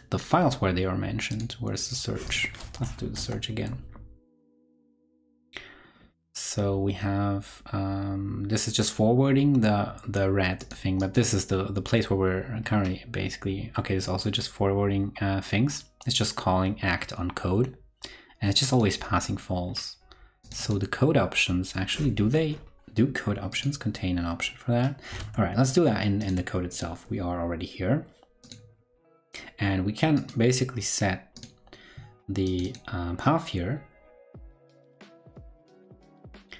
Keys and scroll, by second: 2.9 super+v, 25.1 super+Tab, 26.3 super+Tab.